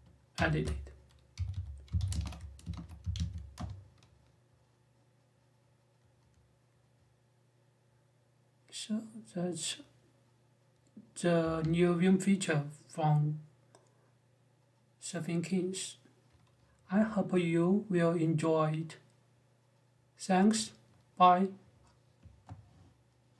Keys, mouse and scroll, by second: 0.1 ctrl+alt+i, 0.9-3.4 typing, 11.2 Escape.